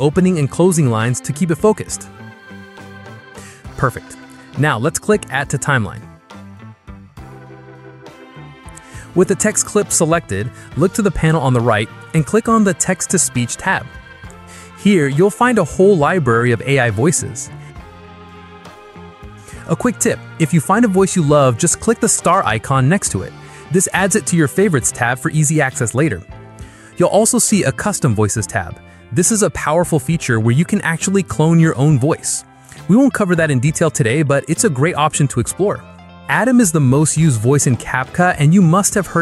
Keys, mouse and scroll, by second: 0.6 click, 2.2 BackSpace, 7.0 click, 8.3 click, 13.8 click, 33.9 click.